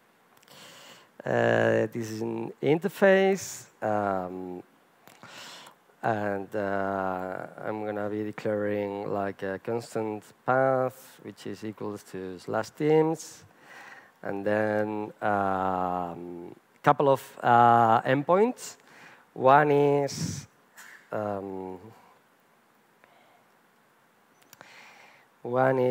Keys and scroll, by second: 19.9 Return, 22.1 Return, 24.2 Return.